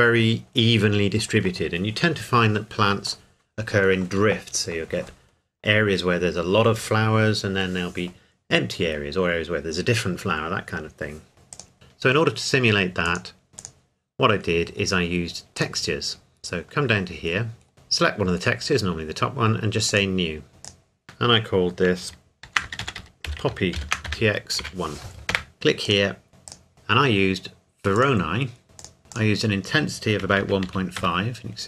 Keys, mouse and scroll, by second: 0.6-1.0 scroll up 2, 11.5 click, 11.7 scroll down 1, 13.1 click, 13.5 scroll down 1, 13.6 click, 14.0-14.4 scroll down 1, 14.4-14.7 scroll up 1, 14.7-15.6 scroll down 1, 15.6 click, 16.1-17.1 scroll down 1, 17.3-17.9 scroll up 1, 19.9 click, 20.7 click, 22.5-24.6 typing, 25.3 KP_Enter, 25.9 click, 27.3 click, 28.0 click, 29.1 click, 30.3 KP_1, 30.4 KP_Decimal, 30.7 KP_5, 31.0 KP_Enter.